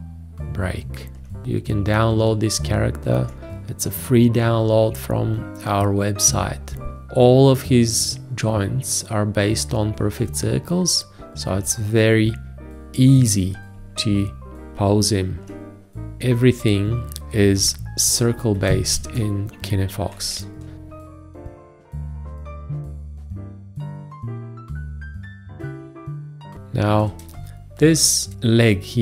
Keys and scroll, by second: 18.5 Escape, 19.1 ctrl+space, 26.6 space.